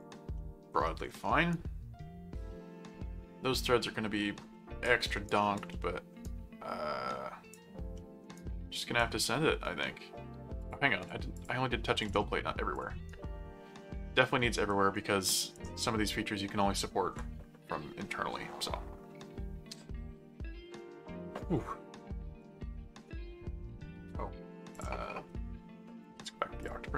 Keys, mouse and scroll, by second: 0.4 middle click, 1.5-4.8 right drag, 5.3 right click, 5.7 middle click, 6.2 right click, 7.9 middle click, 8.3 right click, 10.6 click, 12.0 click, 12.7 click, 13.1-14.7 right drag, 14.9 right click, 24.7 click, 26.6 click.